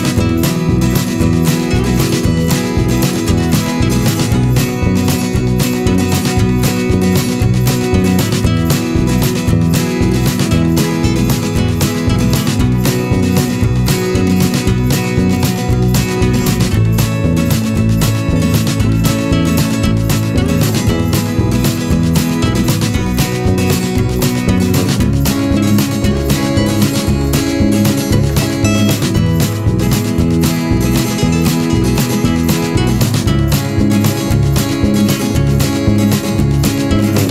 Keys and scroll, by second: 5.0 ctrl+a, 6.7 ctrl+x, 7.5 ctrl+shift+v, 21.9 m.